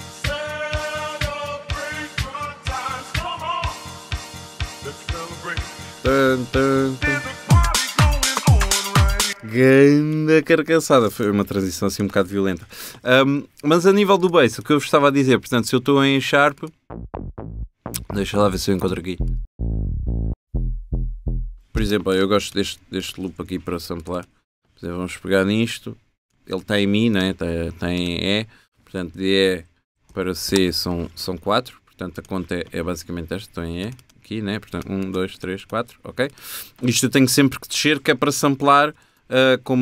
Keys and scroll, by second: 9.3 space, 12.7 shift+super+t, 21.8 space, 22.9 space, 29.5 Down, 31.0 Down, 38.9 super+2.